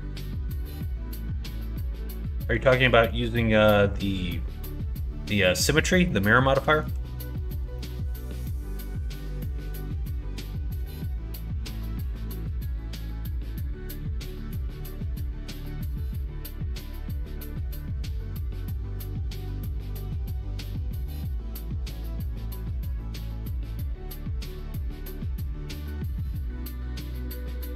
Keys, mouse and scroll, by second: 0.0 middle click, 1.6 middle click, 2.4 middle click, 6.0 middle click, 7.3 middle click, 7.7 shift+middle click, 8.2 middle click, 8.8 middle click, 9.7-12.2 middle drag, 15.5 middle click, 16.1 shift+middle click, 16.8 middle click, 17.5 click, 18.5 middle click, 19.5 middle click, 20.2 middle click, 22.0 middle click, 22.5 Tab, 22.9 middle click, 23.4 alt+z, 23.8 middle click, 24.3-25.5 middle drag, 25.7 alt+z, 26.1 click, 26.8 Tab, 27.1 click, 27.4 Tab.